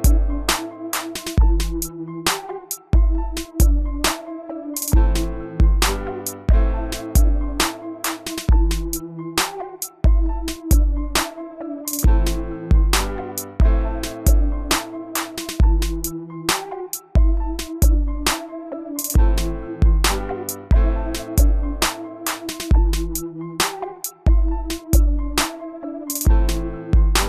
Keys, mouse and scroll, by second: 12.6-14.1 middle drag, 14.1 click, 16.7-19.9 middle drag, 19.9 click, 24.8-26.1 middle drag, 26.2 click.